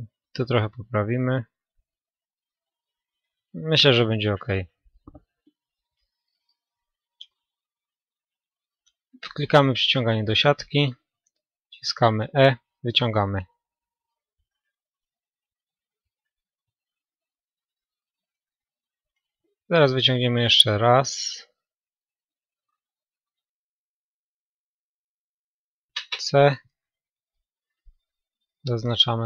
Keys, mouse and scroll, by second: 4.4-6.1 right drag, 5.1-7.2 middle drag, 8.6-10.4 drag, 11.9 e, 14.0-15.6 drag, 14.4-16.7 middle drag, 17.5 a, 18.4-21.6 middle drag, 21.9 b, 22.8-24.8 right drag, 24.1 c.